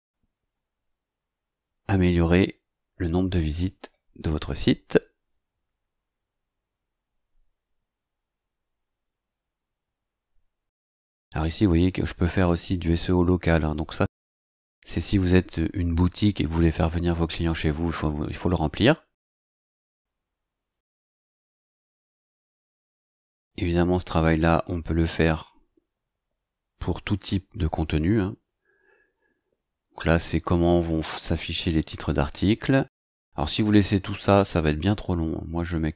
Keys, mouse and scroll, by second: 0.0 scroll down 2, 0.2 scroll up 2, 1.8-2.1 scroll down 2, 3.1 scroll down 2, 4.3 click, 20.0-20.3 scroll down 2, 20.6-21.9 scroll up 5, 22.8 click, 29.1-29.4 scroll down 2, 30.2 scroll down 2, 35.6 click.